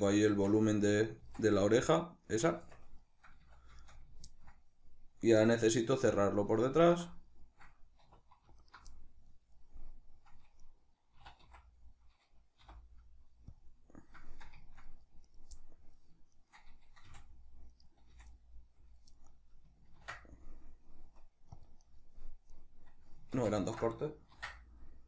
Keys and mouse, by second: 0.1 Tab, 0.9 z, 2.3 Tab, 3.2 a, 6.6 alt+right click, 7.0-8.3 middle drag, 7.8 2, 8.3 alt+right click, 8.6-13.3 middle drag, 10.9 e, 13.3 click, 13.5-15.0 middle drag, 15.0 right click, 15.3 middle click, 16.1 shift+right click, 16.8 f, 17.5 right click, 17.9 f, 18.1-21.7 middle drag, 19.7 ctrl+r, 21.7 right click, 22.3 right click, 23.1 ctrl+z.